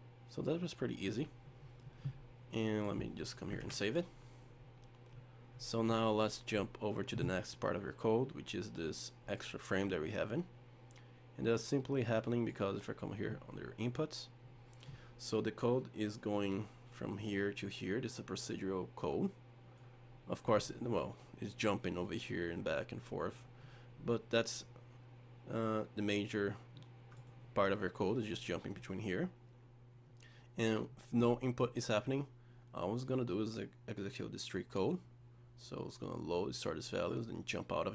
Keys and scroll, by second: 3.6 ctrl+s.